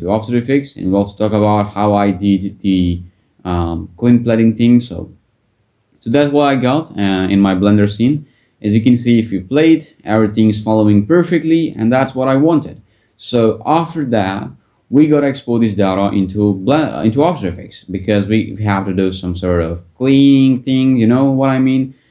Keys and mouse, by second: 3.5 middle click, 4.6 click, 7.4 click, 18.0-19.7 drag.